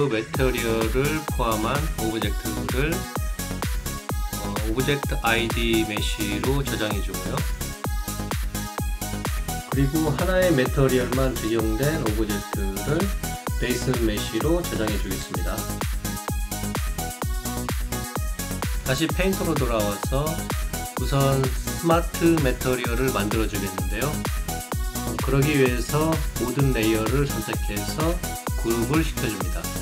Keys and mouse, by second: 0.0 alt+click, 0.3 alt+middle click, 2.3 click, 7.5 click, 8.8 click, 11.8 right click, 13.4 click, 14.5 click, 15.5 click, 16.5 click, 17.4 click, 18.1 click, 24.6 click, 26.1 right click, 27.8 click.